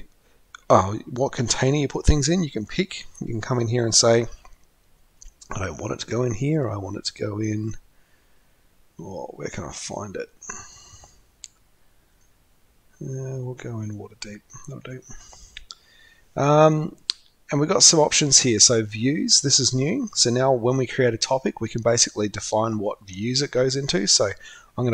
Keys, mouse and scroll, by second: 9.7-10.3 scroll up 2, 11.0-11.9 scroll down 2, 11.9-12.2 scroll down 1.